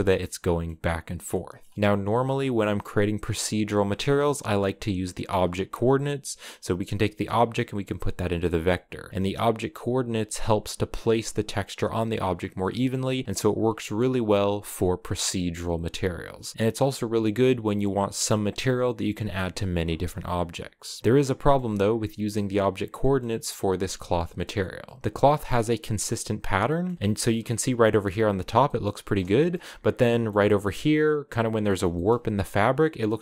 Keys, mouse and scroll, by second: 0.0 middle click, 0.4-1.0 scroll up 1, 1.0-6.1 middle drag, 6.1 click, 8.8 click, 13.1 click, 21.0-24.9 middle drag, 24.9 scroll up 1, 25.0-25.8 scroll down 2, 25.8-27.0 middle drag, 27.0 scroll up 3, 27.3-31.9 middle drag, 31.9-33.2 scroll up 1.